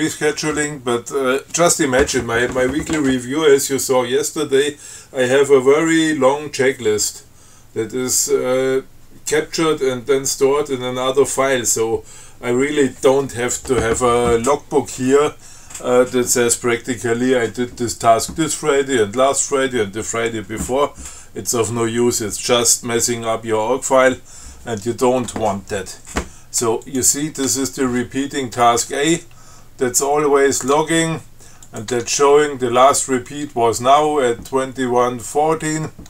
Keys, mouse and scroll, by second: 27.1 click, 27.7 Tab, 29.1 Tab, 30.8 click, 31.0 Tab, 31.9 click, 32.2 Tab.